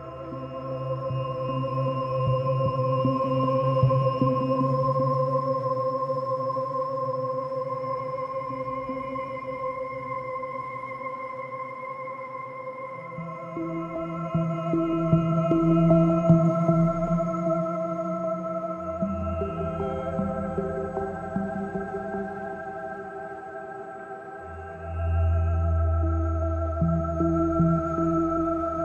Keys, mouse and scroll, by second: 4.0-4.7 scroll up 6, 4.7 click, 8.9 middle click, 12.3 middle click, 17.4 middle click, 21.2 middle click, 23.1 right click.